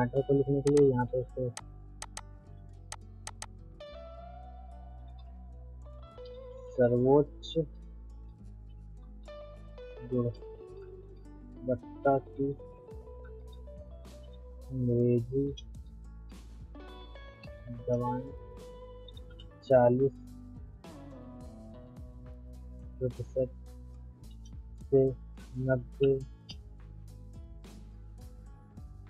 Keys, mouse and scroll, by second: 0.4 ctrl+right click, 0.6 ctrl+click, 1.0 ctrl+a, 1.6 click, 2.3 ctrl+a, 2.9 click, 3.7 ctrl+a, 4.6-18.2 typing, 21.7 shift+5, 23.2 space, 24.2 l, 24.3 space, 26.4 space.